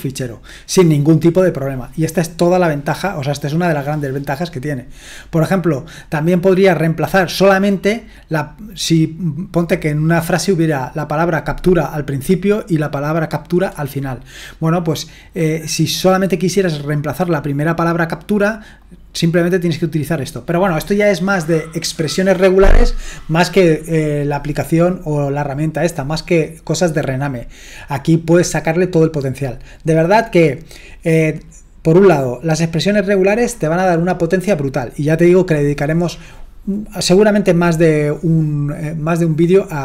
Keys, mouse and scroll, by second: 4.9-7.9 scroll down 1, 7.9-13.2 scroll down 1, 16.9-18.8 drag, 19.1-39.8 drag.